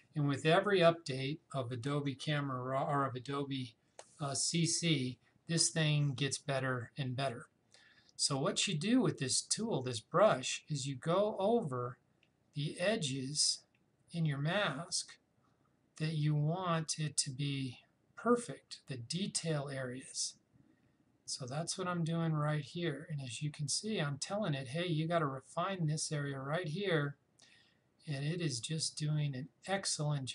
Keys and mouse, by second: 10.5-20.5 drag.